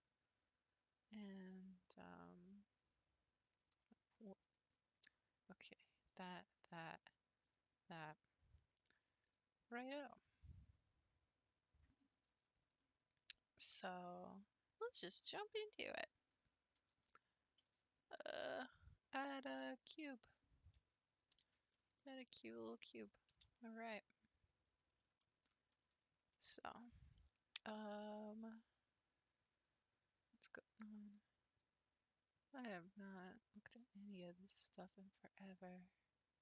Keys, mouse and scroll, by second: 9.2 click, 11.2-12.3 scroll down 3, 12.5-13.7 scroll down 5, 13.7-15.9 scroll down 1, 17.6 shift+a, 20.7 scroll down 1, 20.8-21.6 scroll up 4, 21.7-22.1 shift+middle drag, 22.1 scroll up 1, 22.7 click, 23.3 g, 25.2 shift+middle click, 25.5-26.3 scroll up 6, 26.3-29.3 shift+middle drag, 29.5 click, 30.3 click, 31.5 click, 32.7 click, 33.7 click, 34.8 click.